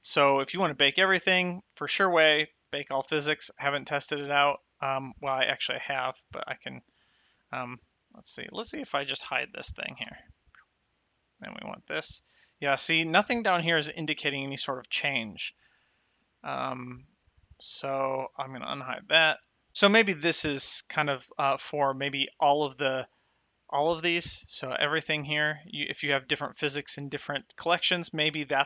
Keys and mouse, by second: 6.2 shift+click, 10.4 h, 11.5 click, 16.4 click, 19.2 click, 23.5 click.